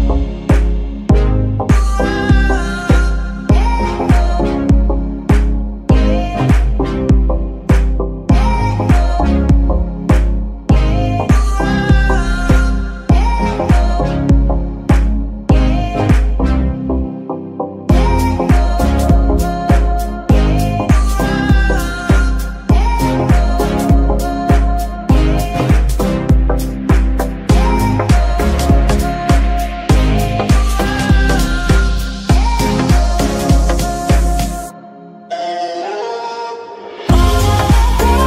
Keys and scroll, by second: 3.6 g, 4.2 Escape, 5.1 g, 5.6 Escape, 6.1 g, 6.7 Escape, 7.4 g, 8.3 Escape, 11.4 r, 11.6 y, 13.0 Escape, 13.9 r, 14.1 y, 15.0 Escape, 15.9 r, 16.2 y, 17.4 Escape, 19.7 ctrl+s, 20.1 Escape, 20.1 g, 20.1 r, 23.9 g, 24.6 Escape, 36.5 Escape.